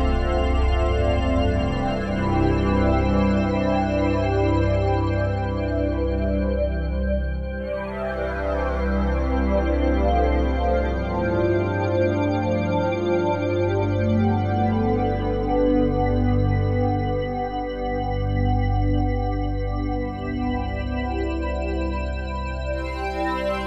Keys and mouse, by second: 1.9 ctrl+s, 4.6 click, 4.9 click, 6.3 ctrl+s, 7.1-9.0 ctrl+alt+drag, 9.8 click, 12.9 alt+shift+click, 13.6-14.3 ctrl+alt+drag, 15.0-16.3 ctrl+alt+drag, 20.4 alt+click, 21.2 click.